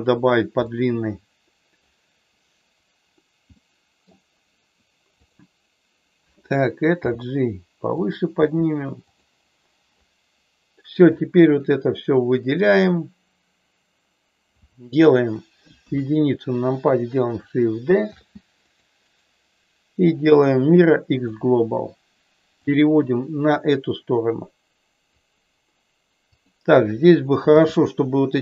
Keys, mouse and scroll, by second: 0.6-1.7 middle drag, 3.6 middle click, 5.3 click, 7.0 g, 8.0 click, 8.4 g, 9.0 click, 11.1-12.6 drag, 15.7 KP_1, 18.1 shift+d, 19.1-21.2 right drag, 22.7-25.1 drag, 27.6 g.